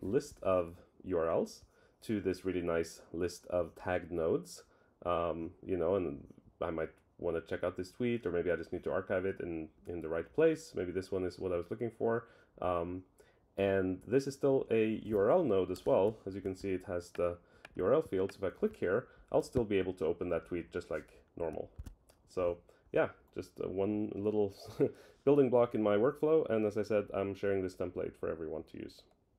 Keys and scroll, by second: 21.7 super+w.